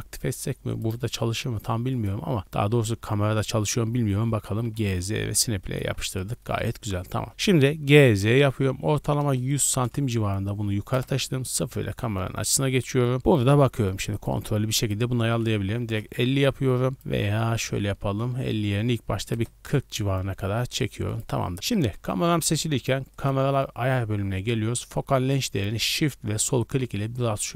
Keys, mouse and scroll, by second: 2.0-4.7 drag, 4.7 z, 5.6 ctrl+click, 6.0-6.6 scroll down 2, 6.4 shift+middle click, 7.7 g, 8.0 z, 8.9 KP_1, 9.2 KP_0, 9.8 KP_Enter, 10.9 KP_0, 11.9 z, 12.4 scroll up 1, 12.8-13.4 scroll down 1, 14.2 click, 14.2 scroll down 1, 14.9-19.9 drag, 21.1 click, 25.9-27.5 shift+drag.